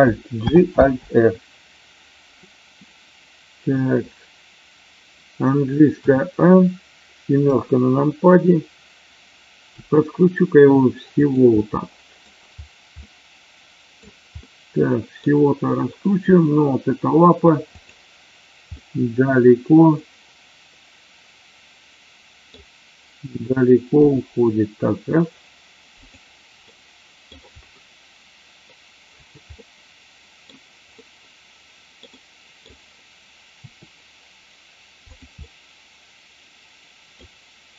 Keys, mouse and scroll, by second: 0.4 alt+g, 0.9 alt+r, 6.2 a, 9.7 r, 11.2 drag, 11.5-12.3 middle drag, 12.9-13.9 middle drag, 14.4-15.0 middle drag, 17.6 click, 18.8-22.5 middle drag, 24.1 g, 26.1 click, 26.7-27.3 middle drag, 29.5-30.5 middle drag, 31.0 scroll up 1, 31.1-32.0 middle drag, 32.0 scroll down 1, 32.1 scroll up 1, 32.2 middle click, 33.6 r, 35.0 click, 35.5-37.1 middle drag.